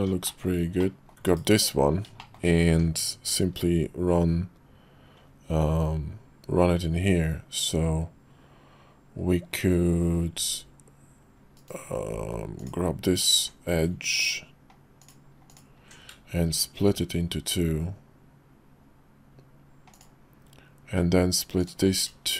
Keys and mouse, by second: 0.2 shift+middle click, 0.8 middle click, 1.3 /, 2.2 shift+middle click, 2.7 Tab, 10.4 ctrl+r, 13.3 Tab, 14.1 click, 15.0 click, 16.9 ctrl+b.